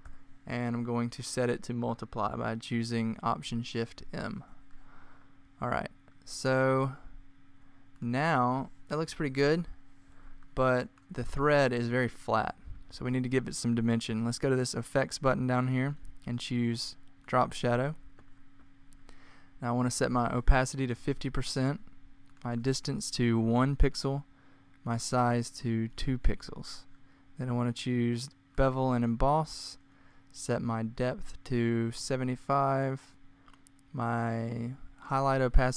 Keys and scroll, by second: 3.9 m, 7.1 alt+shift+m, 9.1 =, 10.8 super+=, 20.6-21.4 typing, 23.2 1, 25.8 2, 28.1 typing, 31.5-32.3 typing.